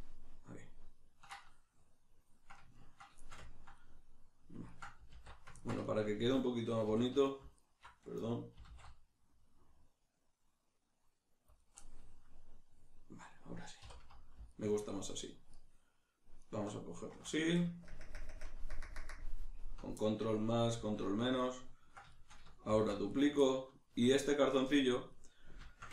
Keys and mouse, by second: 5.1 alt+q, 6.9 2, 7.6 alt+right click, 8.6 s, 11.7 click, 11.8-14.5 middle drag, 13.9 3, 14.5 alt+right click, 15.5 alt+shift+right click, 16.4 alt+shift+right click, 16.9 alt+shift+right click, 18.1 ctrl+KP_Add, 20.3-23.2 middle drag, 20.8 alt+q, 22.7 shift+d, 23.2 right click, 23.4-25.9 ctrl+middle drag.